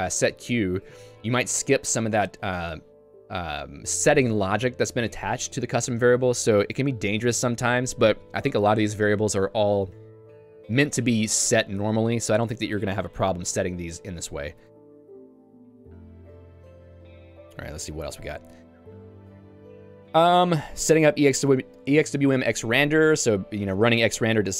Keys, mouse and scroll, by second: 6.0 j, 14.7 ctrl+d, 14.9-19.4 ctrl+d, 20.3 k, 21.3-24.5 typing.